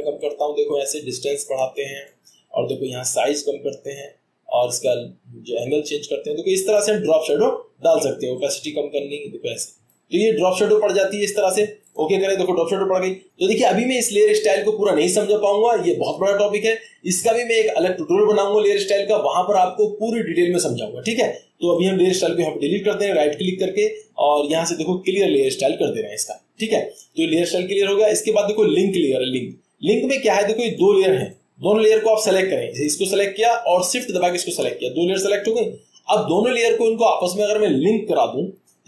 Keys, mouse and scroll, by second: 30.7-32.4 drag, 32.8-33.9 drag, 34.0-35.7 drag.